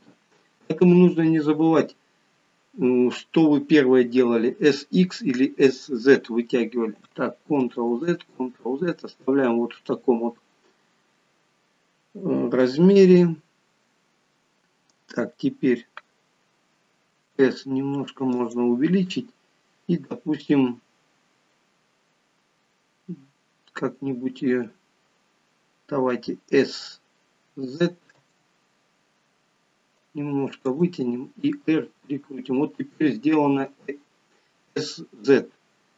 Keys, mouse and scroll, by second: 7.6 ctrl+z, 8.2 ctrl+z.